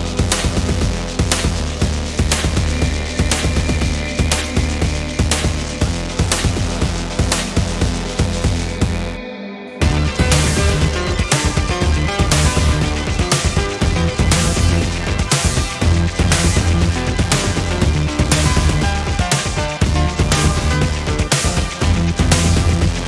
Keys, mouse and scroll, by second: 0.0-1.2 ctrl+drag, 1.4 ctrl+click, 2.0-7.0 ctrl+drag, 7.5 click, 8.1 space, 9.5-9.9 ctrl+scroll up 4, 11.3 click, 13.3 click, 15.7-17.0 drag, 19.1 click, 22.2 click.